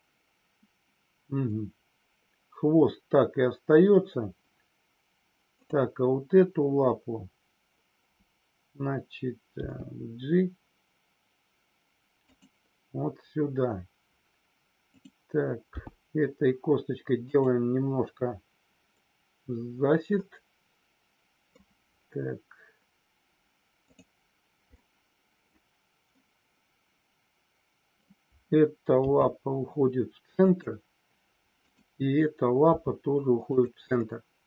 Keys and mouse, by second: 5.5 click, 9.4 g, 14.9 click, 17.3 click, 20.2-21.4 middle drag, 23.8 click, 24.7-25.4 middle drag, 26.0-27.9 middle drag, 30.4 click, 31.5 click, 33.9-34.4 middle drag.